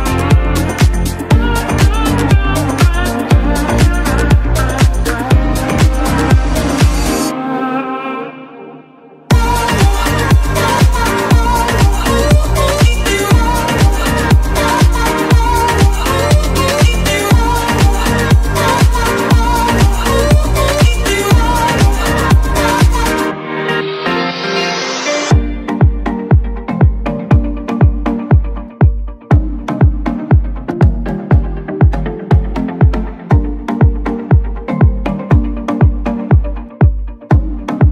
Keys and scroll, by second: 19.9 Escape, 22.7-24.7 typing, 30.0-31.7 typing, 36.6 Escape.